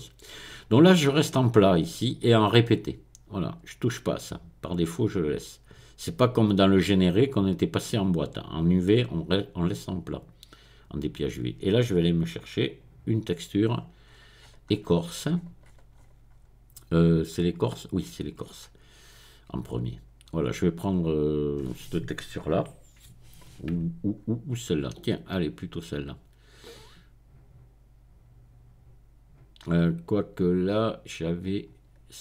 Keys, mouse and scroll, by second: 10.5 click, 10.8 scroll up 1, 12.6 click, 13.6-16.9 scroll down 2, 16.9 scroll down 1, 18.0-20.7 scroll down 2, 22.5 click, 22.9 middle click, 23.6-24.8 scroll down 1, 24.8 click, 25.4-30.7 middle drag.